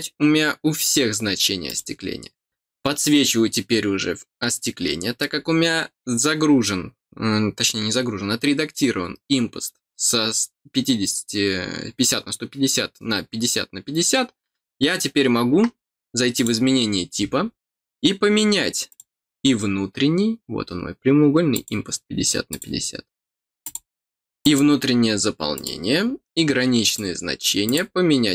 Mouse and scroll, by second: 1.6 click, 16.3 click, 18.8 click, 21.5 click, 22.5 click, 23.6 click, 24.4 click, 25.5 click, 26.0-26.3 scroll down 1, 26.8 click, 27.6 click.